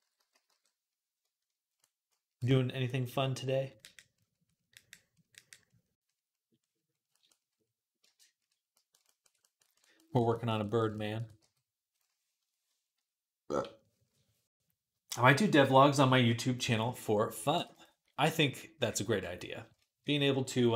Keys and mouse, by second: 0.0-0.3 typing, 0.0-2.4 drag, 3.3-4.6 drag, 4.7-20.7 drag, 11.2 f.